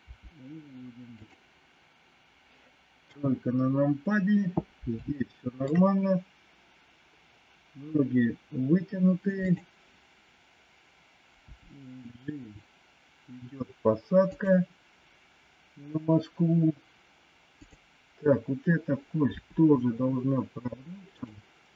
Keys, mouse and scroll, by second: 0.1 r, 3.0 KP_3, 5.1 shift+middle click, 9.5 click, 11.5 g, 19.3 r.